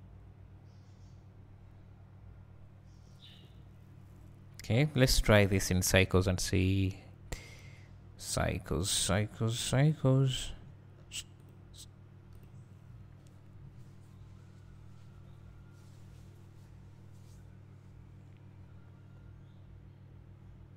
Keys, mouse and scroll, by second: 4.3-8.4 scroll up 2, 8.4-13.7 scroll up 1, 13.7 scroll up 1.